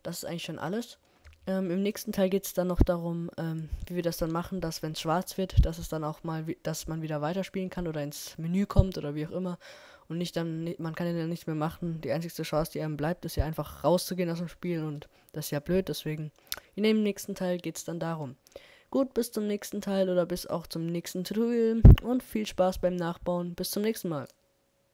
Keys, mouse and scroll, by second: 0.0 middle click, 2.0 KP_0, 2.5-3.8 scroll up 1, 3.8-5.0 scroll up 1, 5.0-5.6 scroll up 1, 8.7-10.9 middle drag.